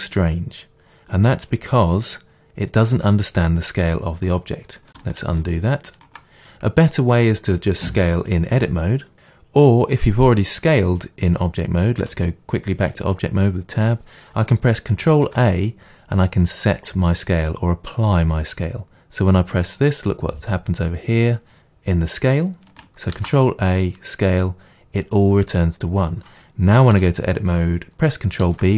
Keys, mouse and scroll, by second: 1.5 click, 5.2 ctrl+z, 12.0 Tab, 15.1 ctrl+a, 23.2 ctrl+a, 27.0 Tab, 28.4 ctrl+b.